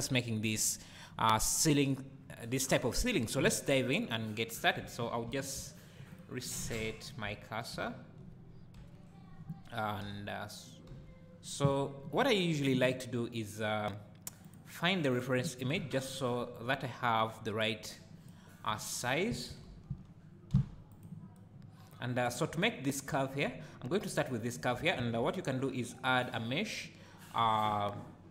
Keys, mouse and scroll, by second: 0.9-2.0 scroll up 2, 2.0-4.9 scroll up 1, 6.1-6.7 shift+right drag, 6.7 shift+c, 7.4-7.8 scroll down 2, 7.8 `, 8.7 KP_1, 10.9 KP_7, 19.6 alt+g, 20.5 s, 21.0 click, 25.0 shift+a.